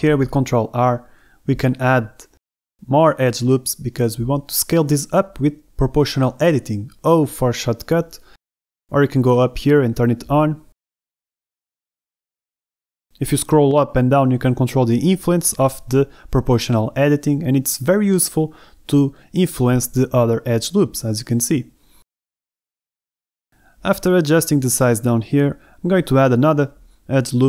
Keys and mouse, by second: 0.1 x, 0.4 click, 0.7 click, 0.9 shift+middle click, 1.1 middle click, 1.3 KP_1, 1.5 a, 2.3 ctrl+r, 4.3 a, 4.6 b, 6.2 ctrl+r, 7.5 a, 7.7 b, 10.3 o, 13.3 o, 13.9 s, 22.4 click, 22.6 g, 22.9 x, 23.6 click, 23.8 a, 24.1 b, 25.4 g, 25.7 x.